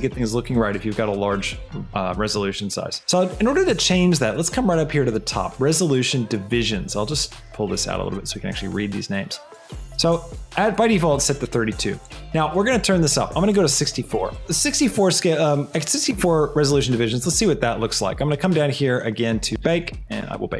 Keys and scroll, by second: 13.7 KP_4, 14.1 Return.